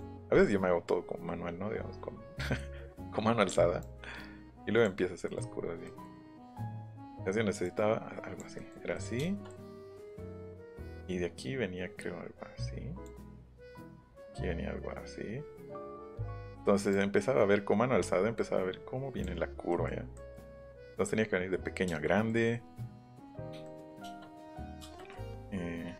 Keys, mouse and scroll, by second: 3.8-4.8 drag, 5.2 middle click, 5.5 middle click, 6.6 ctrl+z, 7.6 click, 8.6 middle click, 8.9 middle click, 9.2 shift+middle click, 11.0-13.0 drag, 13.7-16.0 drag, 16.9-18.0 drag, 18.0-19.2 middle drag, 19.7 middle click, 20.1 middle click, 20.7-24.4 middle drag, 25.0 middle click.